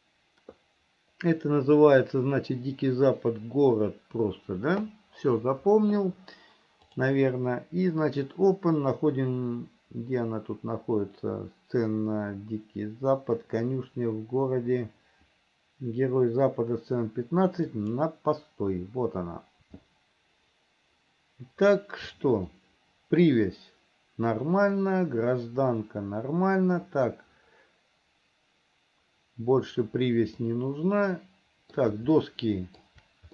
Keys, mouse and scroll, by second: 7.0-19.6 drag, 22.8 middle click, 30.7-32.2 middle drag, 32.5 shift+middle click.